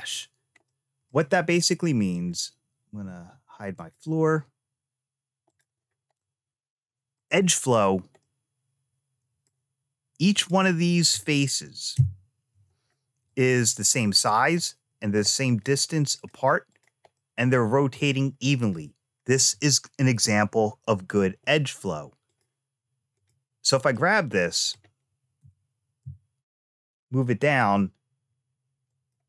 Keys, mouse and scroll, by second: 0.5 middle click, 2.0-5.3 drag, 6.0-7.1 middle drag, 8.1-9.4 middle drag, 10.2 click, 11.8 3, 13.1 click, 14.0 click, 14.5 middle click, 15.5 click, 16.0 click, 16.6 click, 17.0 middle click, 18.5 click, 22.1 click, 23.0 click, 23.8 middle click, 25.3 g.